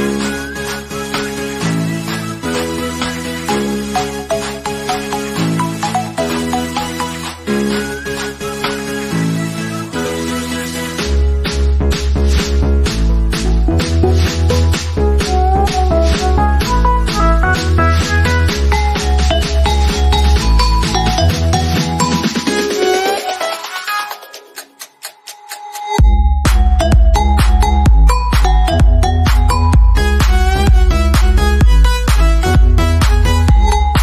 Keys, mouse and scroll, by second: 1.9 click, 7.5 click, 9.8 scroll up 1, 11.8 scroll up 1, 12.2-15.0 middle drag, 15.4-19.4 drag, 17.7 typing, 22.9 click, 23.0 click, 25.7 click, 25.7 typing, 29.2 click, 31.5 click, 33.5 middle click.